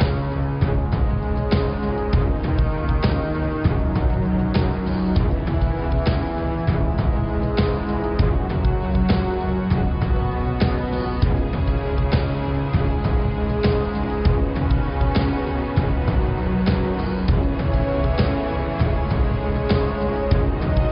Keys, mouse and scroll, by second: 0.5 click, 0.8 shift+click, 1.7 shift+click, 2.4 shift+click, 3.0 shift+click, 4.1 alt+shift+click, 5.1 alt+shift+click, 5.7 alt+shift+click, 6.0 alt+shift+click, 6.9 alt+shift+click, 10.9-14.6 drag, 16.4-18.0 drag, 19.1-20.4 drag.